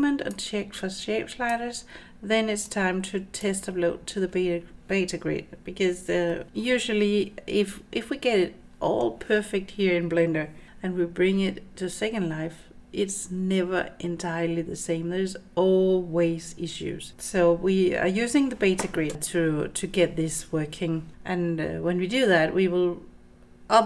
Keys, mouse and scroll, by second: 0.3-1.6 drag, 2.7 click, 6.3 middle drag.